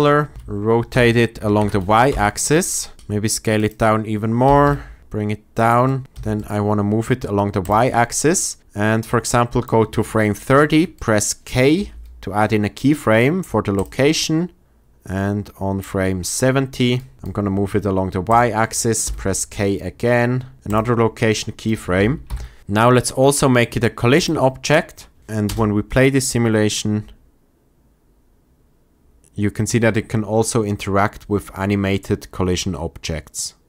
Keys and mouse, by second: 0.4 r, 0.8 y, 1.3 KP_9, 1.5 KP_0, 2.0 Return, 3.3 s, 4.4 g, 4.6 z, 5.5 click, 6.3 click, 6.3 g, 7.5 click, 10.5 shift+click, 10.9 click, 11.7 k, 17.1 g, 18.2-18.9 drag, 18.9 k, 22.2 shift+Left, 24.1 click, 25.2 shift+Left, 25.2 space, 25.4 space.